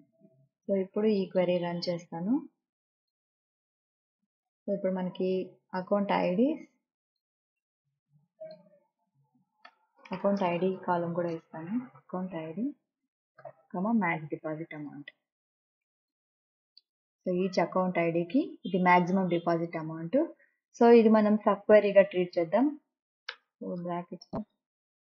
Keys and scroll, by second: 9.2-12.6 typing, 14.0 ,, 23.0 Right, 23.4 BackSpace, 24.4 shift+0, 25.0 Left.